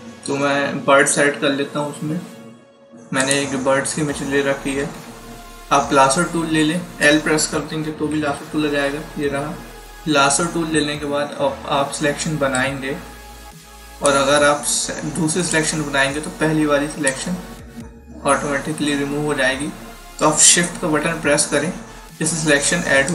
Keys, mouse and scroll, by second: 3.1 click, 4.7 d, 8.0 l, 12.4 click, 20.9 click, 23.0 shift+click.